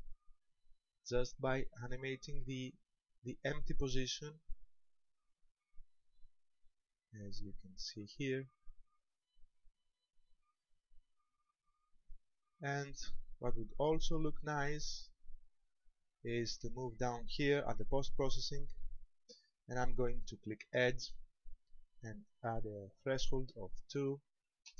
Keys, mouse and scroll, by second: 11.5 right click, 14.7 click, 16.6-18.5 scroll down 7, 18.5 click, 20.8 click, 23.2 click.